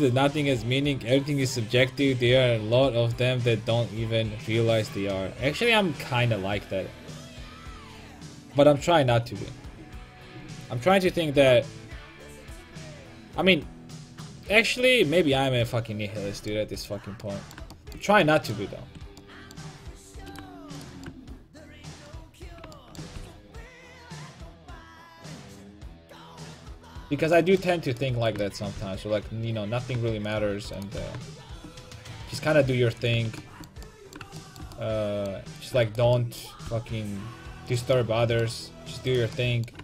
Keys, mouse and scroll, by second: 16.9 middle click, 17.3 middle click, 18.8 Tab, 20.3-22.7 right drag, 22.7 middle click, 23.2 g, 26.4 right click, 26.9 a, 27.4-28.8 drag, 27.9-30.1 right drag, 28.8 g, 30.5 a, 30.8-32.3 right drag, 31.0 g, 33.2 a, 33.6 middle click, 35.6 right click, 36.5 click, 36.7 g, 37.8-39.5 drag, 39.1 middle click, 39.1 right click, 39.6 middle click.